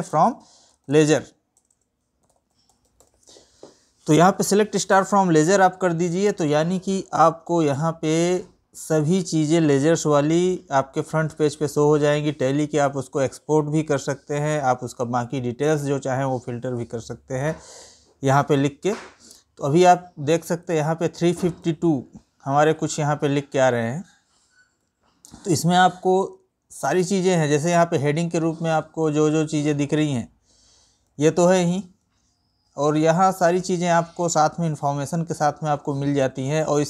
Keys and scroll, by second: 20.2 Right, 30.7 Right.